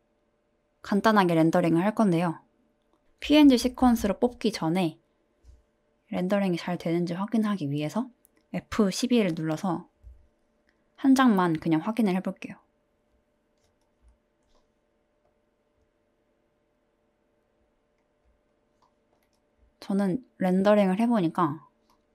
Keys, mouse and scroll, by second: 8.0 click.